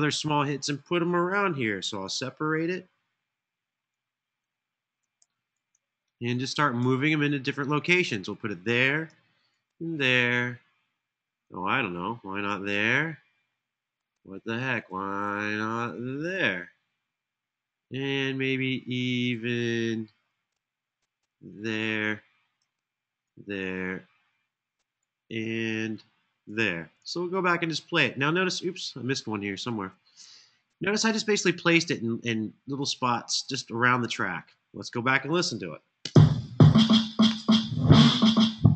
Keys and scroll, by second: 1.8 super+e, 5.0 super+e, 9.2 super+d, 23.0 super+d, 35.8 space.